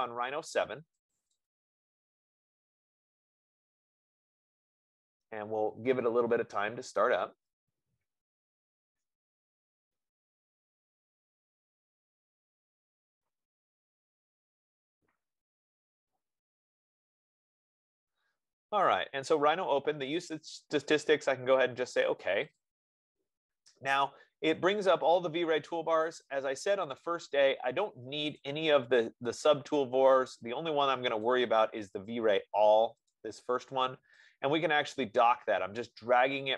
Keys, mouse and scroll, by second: 18.5 F15, 20.7 click, 22.9 click, 27.3 click, 28.9 click, 29.9 click, 30.5 click, 31.6 click.